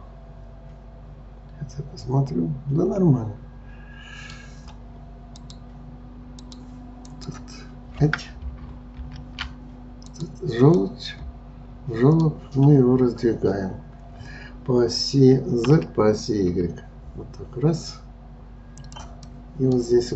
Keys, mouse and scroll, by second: 5.4-7.2 drag, 9.0 ctrl+z, 10.1 click, 10.8-13.8 middle drag, 15.7 s, 19.3-20.1 middle drag.